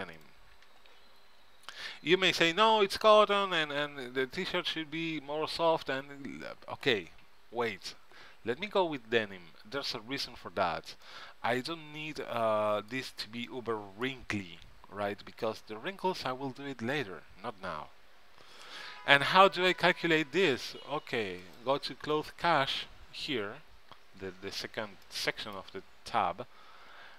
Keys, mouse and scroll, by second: 11.2 middle click, 12.4 middle click, 13.6-15.3 middle drag, 21.6-23.3 drag, 25.2-26.7 middle drag.